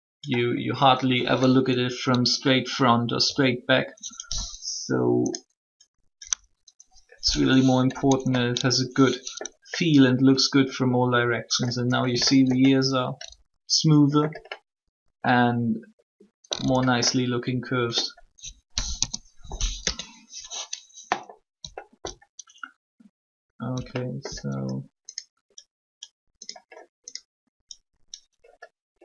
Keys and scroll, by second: 5.9 3, 7.9 Tab, 18.7 3, 19.8 Tab.